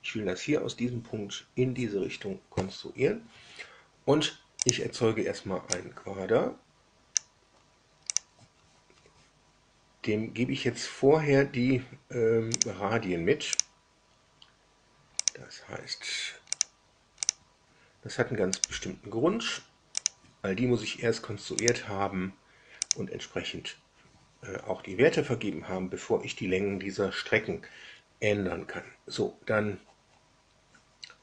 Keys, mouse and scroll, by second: 4.6 click, 5.7-7.3 drag, 8.0 click, 12.5 click, 13.5 click, 15.2 click, 16.5 click, 17.2 click, 18.5 click, 19.9 click, 21.5 click, 22.8 click.